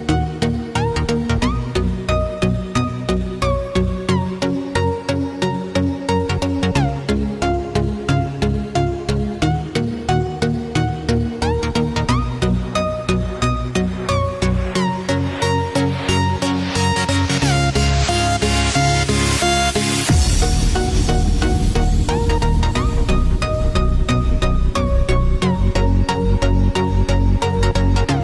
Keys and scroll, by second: 17.9 Return, 19.1 Return, 19.4-26.5 typing, 28.0-28.2 typing.